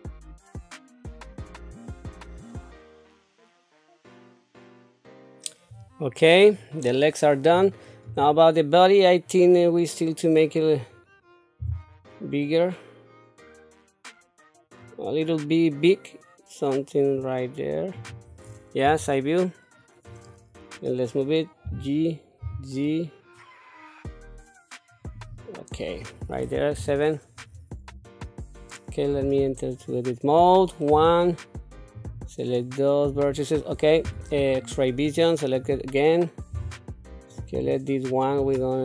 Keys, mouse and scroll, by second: 0.0-1.7 typing, 0.9 middle click, 2.0 click, 2.0 middle click, 2.7 middle click, 2.7 Tab, 2.8 click, 3.0 alt+s, 3.3 Tab, 3.4 Tab, 3.5 click, 3.6 alt+s, 3.8 alt+s, 4.0 middle click, 4.3 Tab, 4.8 middle click, 4.9 KP_7, 8.0 click, 11.6 s, 18.8 KP_3, 21.6 g, 26.8 KP_7, 29.1 Tab, 30.9 1, 31.9-33.1 drag, 34.0 q, 35.0 click, 36.5 s, 38.4-38.8 drag.